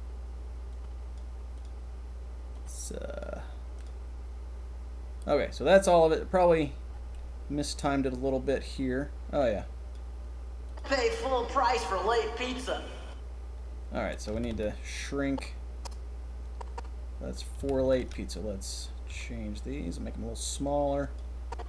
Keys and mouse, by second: 1.1-2.5 drag, 3.2-7.1 drag, 7.8-8.4 drag, 9.9 click, 10.7 click, 14.2 a, 14.4 a, 17.5 a, 17.7 a, 17.9 b, 19.2 s, 21.5 click.